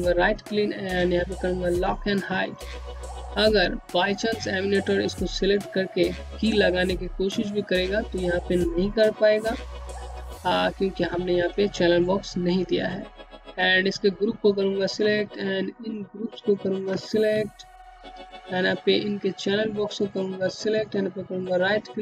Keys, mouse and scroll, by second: 0.0 click, 11.7 click, 13.8 ctrl+click, 14.3 ctrl+click, 15.5 ctrl+click.